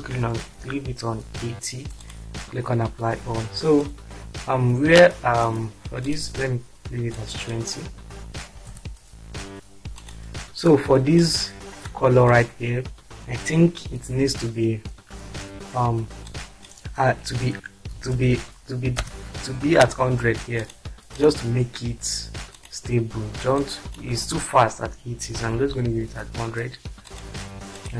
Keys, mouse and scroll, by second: 0.5-1.0 typing, 2.0 click, 3.8 click, 4.4-5.4 drag, 7.1 click, 8.6 typing, 10.0 drag, 11.2-12.0 drag, 16.4 click, 17.9-19.0 typing, 22.5 click, 23.6 click, 25.4 typing, 27.1 click, 27.8 click.